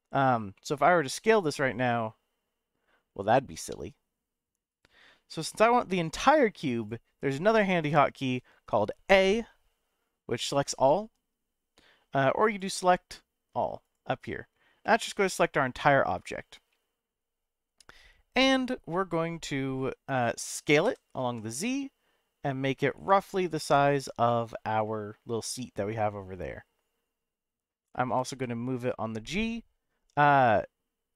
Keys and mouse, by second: 0.5 middle click, 1.3 s, 4.7 right click, 5.3-6.5 middle drag, 6.8 click, 9.1 a, 12.7-13.9 drag, 14.8-18.4 middle drag, 20.8 s, 21.2 z, 24.0 click, 24.3 middle click, 25.9-27.7 middle drag, 28.1 g, 28.3 z, 30.2 right click.